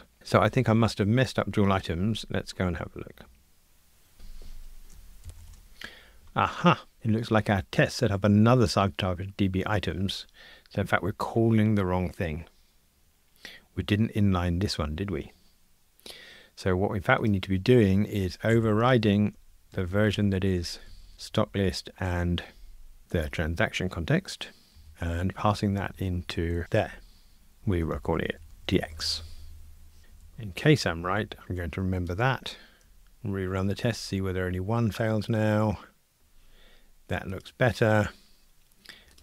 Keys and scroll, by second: 18.5 super+BackSpace, 21.1 Return, 24.9 Return, 25.8 alt+shift+Left, 26.7 Escape, 28.6 Delete, 30.1 alt+Up, 32.1 super+c, 33.2 ctrl+r.